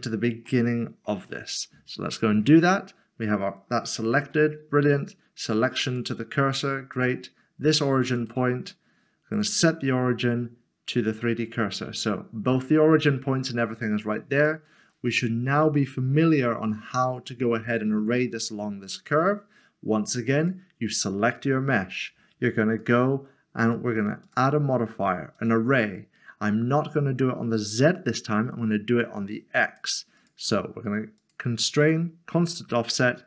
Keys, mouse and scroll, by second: 0.6 shift+middle click, 4.1 s, 5.9 click, 8.1 click, 11.1 click, 14.4 click, 15.1 click, 15.3 middle click, 20.4 click, 22.8 click, 29.6 click.